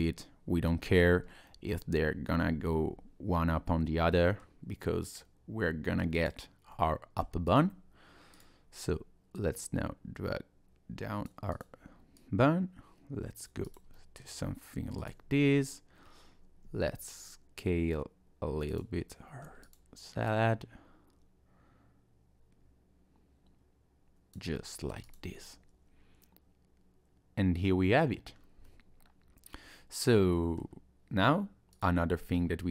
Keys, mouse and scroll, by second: 0.9 scroll up 1, 1.2 scroll down 2, 1.4 middle click, 4.1 middle click, 6.2 click, 6.7 middle click, 7.5 click, 8.3 click, 9.3 click, 11.5 click, 12.2 click, 13.7 click, 14.0 middle click, 15.0 click, 16.6 s, 19.1 middle click, 19.6 click, 20.3 click, 24.6 middle click, 25.0 click, 25.3 middle click, 28.3 scroll down 2, 28.7 middle click, 31.7 click, 32.3-32.7 scroll up 2.